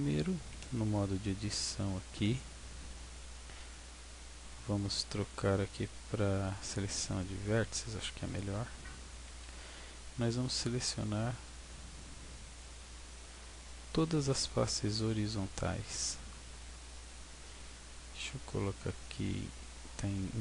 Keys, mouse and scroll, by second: 0.4 scroll up 2, 0.9 scroll down 1, 2.8 Tab, 7.3 click, 9.2 a, 13.0 b, 19.5 z, 19.9 z, 20.2 z.